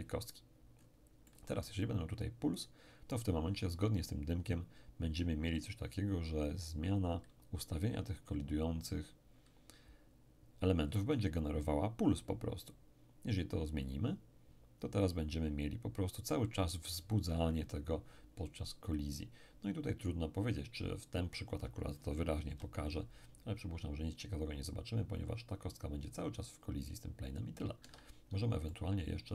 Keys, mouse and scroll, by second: 0.8-1.2 scroll up 1, 1.2-2.6 middle drag, 13.8 click, 22.5 p, 27.8 Escape, 28.7-29.3 middle drag.